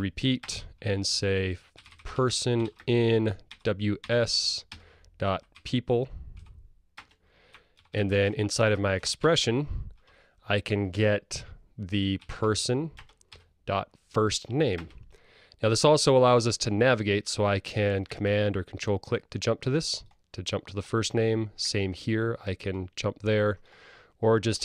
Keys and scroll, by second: 1.8 Return, 7.0 Return, 13.1 Return.